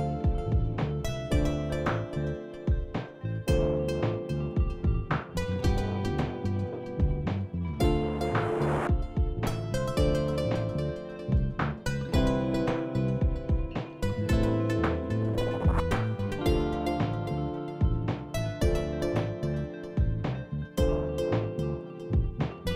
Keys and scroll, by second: 0.0-2.2 typing, 3.9 shift+s, 4.6 shift+s, 10.3 t, 13.3 i.